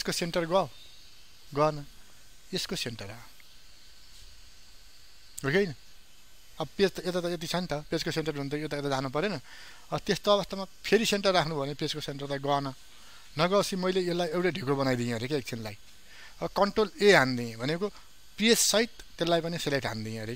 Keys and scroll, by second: 17.0 ctrl+a.